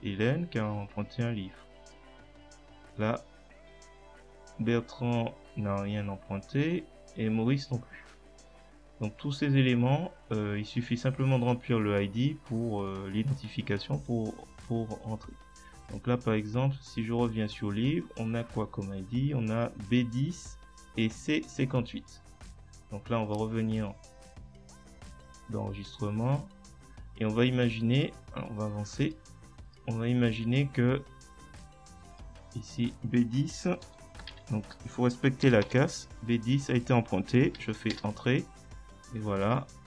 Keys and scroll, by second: 34.3-36.2 typing, 37.9 Return.